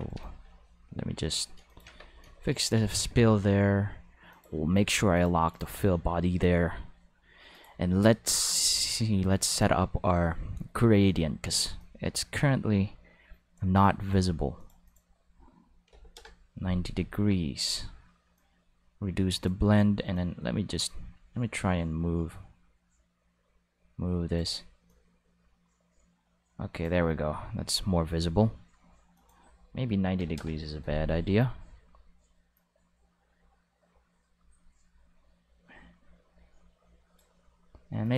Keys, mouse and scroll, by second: 0.1 right click, 0.5 g, 1.7 click, 2.7 ctrl+s, 4.3 click, 5.1 click, 5.5 click, 7.5 click, 8.3 click, 9.4 click, 11.8-13.5 drag, 13.8 click, 14.6 click, 14.8 click, 15.8 9, 15.9 0, 16.1 Return, 18.3-19.4 drag, 20.1-24.3 drag, 24.8-26.8 drag, 29.1 click, 30.1 o, 30.3 Return, 32.5-37.1 drag, 38.0 click.